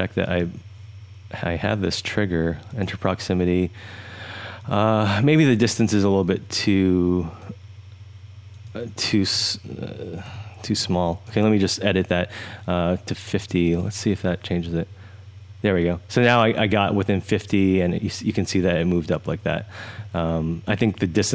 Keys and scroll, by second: 10.2-10.6 typing.